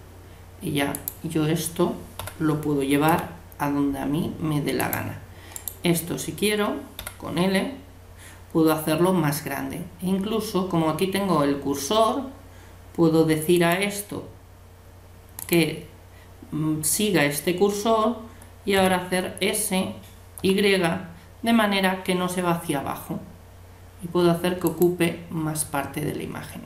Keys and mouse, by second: 2.2 l, 6.6 right click, 7.0 l, 13.5-15.3 drag, 18.8 s.